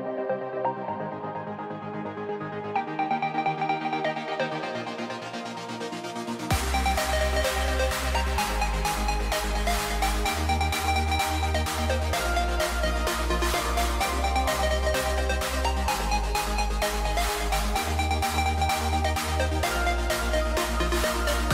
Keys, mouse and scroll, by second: 1.8 Left, 9.2 KP_1, 17.0 s.